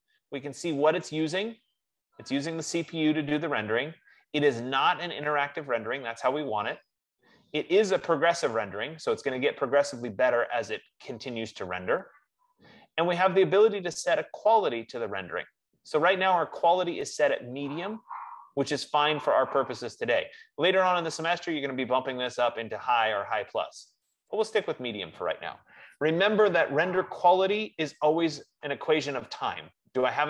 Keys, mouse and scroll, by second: 9.8 F15, 24.2-29.4 drag.